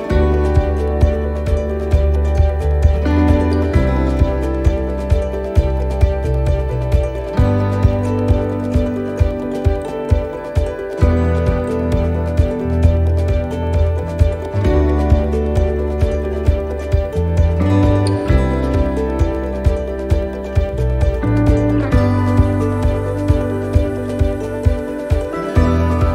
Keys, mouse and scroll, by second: 0.6 right click, 1.6 right click, 2.5 click, 4.5 click, 6.7 right click, 9.2 shift+middle click, 9.7-10.4 scroll up 5, 10.2 shift+middle click, 10.9 scroll down 1, 11.8 click.